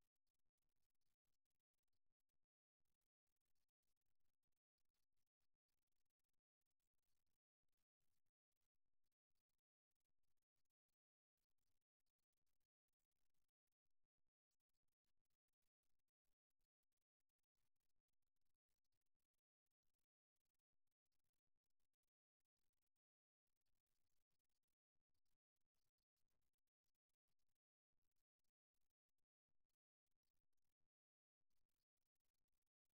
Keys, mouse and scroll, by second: 3.6-6.9 middle drag, 6.9 g, 9.2-10.9 drag, 13.1-14.9 right drag, 14.5 s, 16.0-17.2 right drag, 18.7 KP_1, 21.6-24.0 right drag, 23.4 g, 27.6-29.4 drag, 29.6 n, 31.6-32.9 drag.